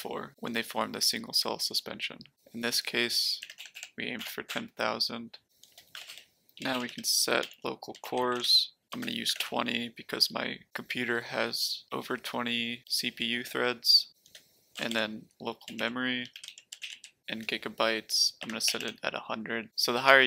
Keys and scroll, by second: 3.1-9.9 typing, 14.2-19.3 typing.